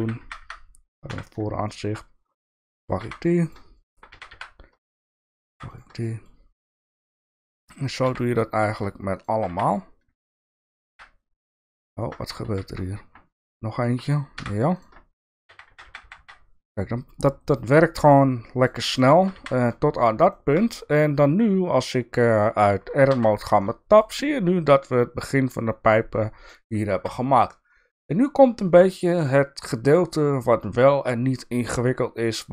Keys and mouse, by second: 0.2 f, 0.4 f, 1.1 KP_1, 1.7 shift+middle click, 2.4 shift+click, 2.8 shift+click, 3.0 f, 3.4 click, 4.1 f, 4.9 shift+click, 5.3 shift+click, 6.0 shift+middle click, 7.4 shift+click, 8.0 f, 8.6 click, 9.4 f, 10.8 f, 12.4 ctrl+z, 14.3 f, 14.7 click, 15.4 f, 15.8 f, 16.0 f, 16.1 f, 19.3 f, 20.3 shift+middle click, 23.0 Tab, 23.6 middle click, 24.6-25.9 middle drag, 26.5 middle click, 26.9 Tab, 27.5-29.2 middle drag, 29.7 middle click.